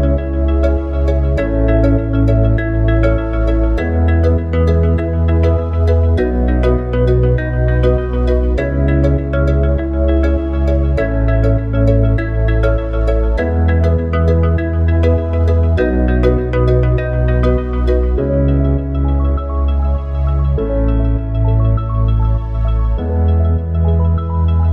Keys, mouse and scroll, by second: 3.0 click, 4.0 click, 8.0 click, 8.9 click, 10.4 ctrl+v, 10.9 click, 12.4 click, 13.4 s.